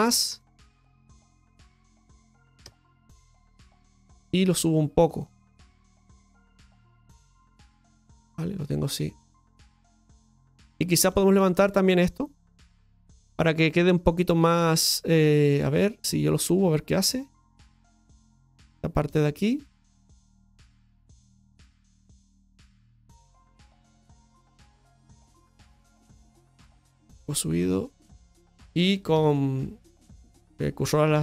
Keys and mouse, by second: 3.3 middle click, 5.0-6.0 drag, 6.4 middle click, 6.9 right click, 8.3-10.8 middle drag, 10.9-13.4 shift+middle drag, 13.4 right click, 13.8-15.2 shift+right drag, 15.3-16.4 middle drag, 16.9-17.9 shift+right drag, 18.5-19.6 shift+right drag, 19.8-20.8 middle drag, 21.5-24.4 shift+right drag, 24.4 middle click, 26.0 click, 26.9-28.2 middle drag.